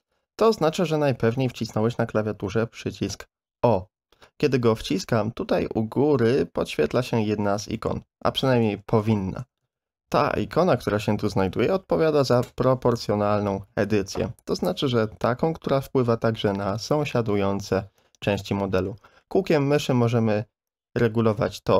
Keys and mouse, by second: 0.1 g, 3.9 o, 6.3-9.6 typing, 7.8 middle click, 16.0-21.7 drag.